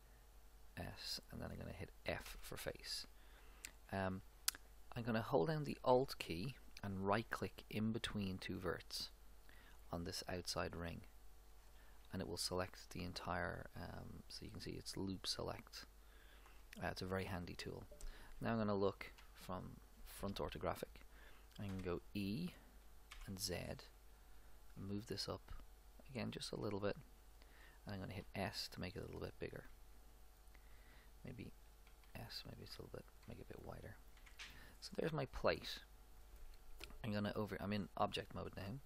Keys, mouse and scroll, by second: 2.3 f, 11.9-13.5 right drag, 19.3 KP_1, 21.7 e, 28.3 s, 29.7 middle click, 31.9 s, 33.6-35.4 middle drag, 34.2 Tab.